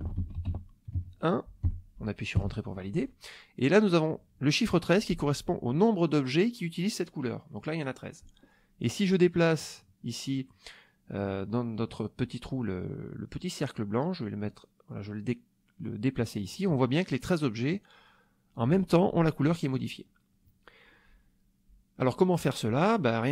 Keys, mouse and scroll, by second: 0.0-1.6 typing, 2.3 Return, 14.5-16.8 drag.